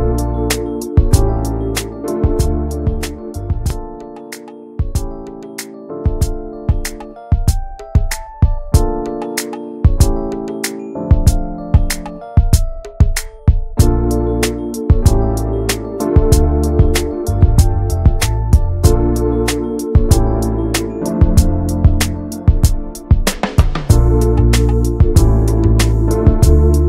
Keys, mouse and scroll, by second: 0.8 shift+middle click, 1.3 e, 2.7 middle click, 3.3 click, 3.6 alt+shift+click, 3.8 alt+shift+click, 4.1 middle click, 4.5 e, 6.3 alt+middle click, 7.2 alt+s, 8.4 middle click, 8.7 alt+z, 8.9 middle click, 9.1 Tab, 9.2 click, 9.4 alt+z, 9.6 click, 10.0 ctrl+a, 10.5 middle click, 10.7 ctrl+s, 10.9 middle click, 11.0-11.4 scroll up 1, 11.4 Tab, 11.5 click, 12.3 2, 12.4 click, 12.8 alt+shift+click, 13.2 middle click, 13.8 alt+shift+click, 14.1 shift+middle click, 14.8 ctrl+b, 16.9-19.2 drag, 20.0-21.5 drag, 21.5 middle click, 22.4-23.7 drag, 23.7 middle click, 24.0 scroll up 1, 24.2-26.1 shift+middle drag, 26.1-26.8 drag.